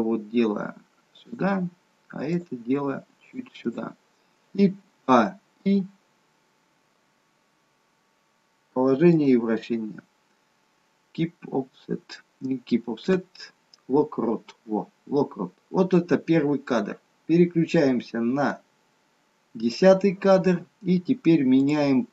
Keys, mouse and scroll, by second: 0.1 r, 2.4 click, 2.5 r, 5.1 a, 18.6 click.